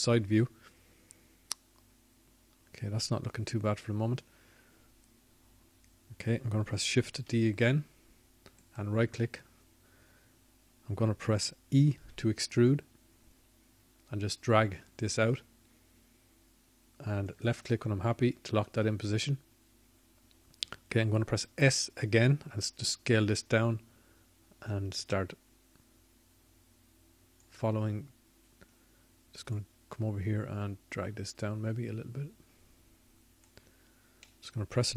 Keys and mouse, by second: 2.9-5.4 drag, 5.4 KP_3, 13.2 shift+d, 14.9-16.2 drag, 18.2 e, 23.5-26.9 drag, 26.9 s, 33.7-34.9 drag.